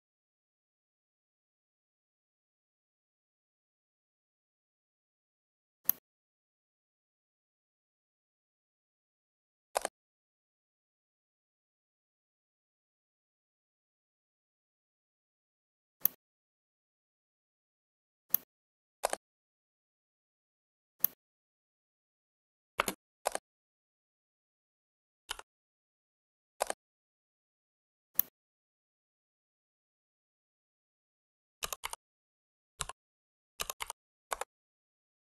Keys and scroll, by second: 22.7 space, 31.6-33.7 typing, 34.2 Return.